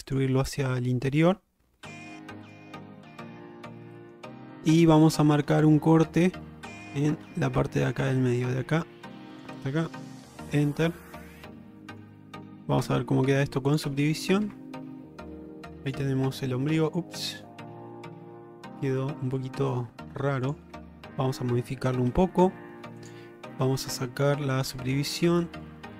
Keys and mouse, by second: 0.4 middle click, 2.6 click, 3.4 middle click, 4.0 shift+middle click, 4.9 middle click, 5.5 shift+middle click, 7.3 k, 11.0 alt+middle click, 11.8 shift+middle click, 13.8 click, 14.5 Tab, 15.8 middle drag, 17.3 middle drag, 19.5 shift+middle click, 20.5 click, 20.8 Tab, 23.1 click, 24.1 shift+middle click, 24.7 middle click.